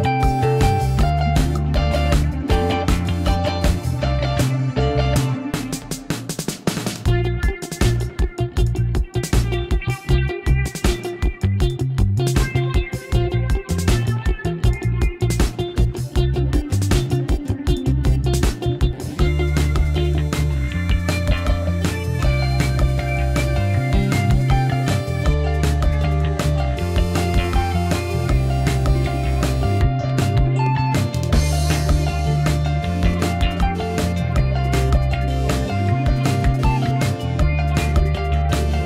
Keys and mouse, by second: 0.4-1.2 middle drag, 2.1 click, 2.8-3.8 middle drag, 4.1 Tab, 4.7-7.0 middle drag, 7.2 shift+middle drag, 7.8 click, 9.5 ctrl+r, 11.9 ctrl+r, 15.0 click, 15.8 ctrl+r, 19.3 click, 20.0-20.5 middle drag, 21.6 3, 22.2 alt+click, 22.7 middle click, 24.5 x, 25.4 middle click, 26.4 2, 27.3 f, 27.5 middle drag, 28.3 f, 28.7-30.2 middle drag, 30.4 shift+middle click, 30.7 middle drag, 31.7 ctrl+r, 33.1 click, 33.8 ctrl+r, 36.0 click, 36.5 shift+middle drag, 37.3 3, 37.4 click, 37.8 alt+click, 38.5 ctrl+x.